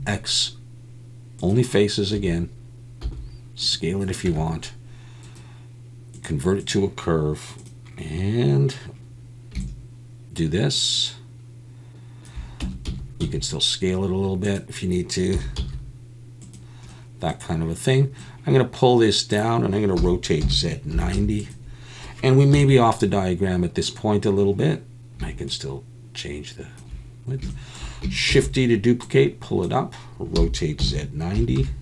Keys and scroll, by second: 2.2 a, 3.0 s, 4.3 Tab, 12.6 Tab, 12.9 a, 13.2 s, 15.3 s, 15.6 z, 20.0 r, 20.4 z, 20.9 9, 21.1 0, 22.5 KP_1, 28.3 shift+d, 30.4 r, 30.8 z, 31.3 9, 31.6 0.